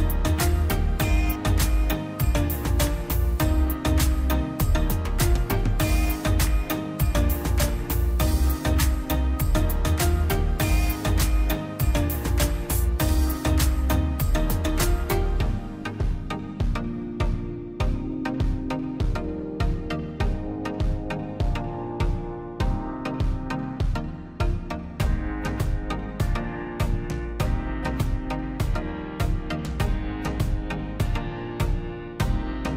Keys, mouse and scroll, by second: 1.5 scroll down 1, 1.6 middle click, 1.9-3.2 drag, 4.3 scroll down 1, 4.9 click, 5.3 scroll down 1, 5.7 click, 9.1-10.6 middle drag, 10.6 click, 10.7-11.1 scroll up 1, 11.3 middle click, 11.6 scroll up 1, 12.2-13.6 drag, 14.3 Escape, 14.8 click, 16.4 click, 16.5 scroll down 1, 16.9 click, 17.1 scroll down 1, 17.5 middle click, 17.9 click, 18.4 Delete, 18.7 click, 18.8 Delete, 19.0-19.5 scroll down 1, 19.5 middle click, 20.5 click, 20.6 scroll down 1, 20.9 scroll up 1, 21.0 click, 21.7 scroll down 1, 22.2 middle click, 23.1 scroll down 1, 24.0 middle click, 24.4-25.2 scroll up 2, 24.6 click, 25.9 click, 28.0 Escape, 28.2 click, 29.4 click, 30.9 click.